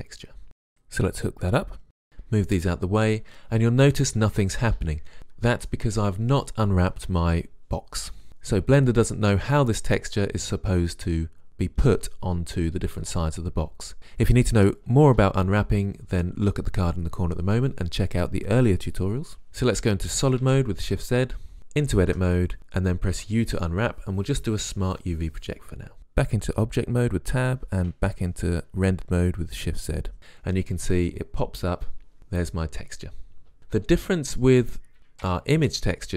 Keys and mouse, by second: 0.0 Return, 2.1 shift+z, 19.5 shift+z, 20.6 shift+z, 21.6 shift+z, 22.3 Tab, 23.3 u, 27.0 Tab, 28.5 shift+z.